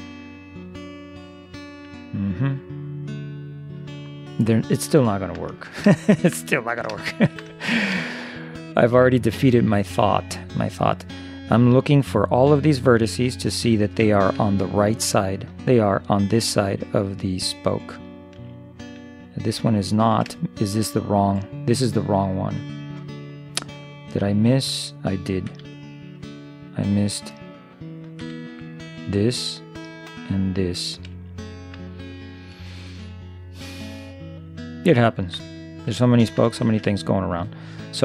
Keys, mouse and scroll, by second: 5.6-9.7 middle drag, 11.3-16.1 middle drag, 16.6-19.9 middle drag, 21.9 middle click, 24.1-25.8 middle drag, 25.6 c, 28.3 c, 31.3-34.6 middle drag, 35.5-37.3 middle drag.